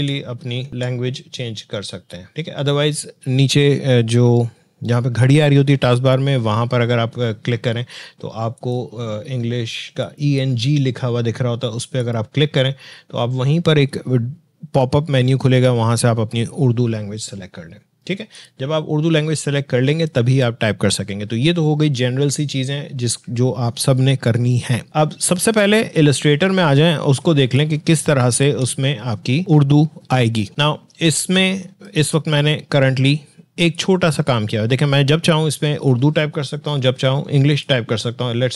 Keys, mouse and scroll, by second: 2.3 click, 7.1 click, 7.2 scroll, 8.5 click, 18.3 click, 25.8 alt+Caps_Lock, 25.8 click, 27.1 alt+Tab, 28.4 alt+click, 30.6-31.8 drag, 34.7 Delete, 37.5 Delete, 37.5 click.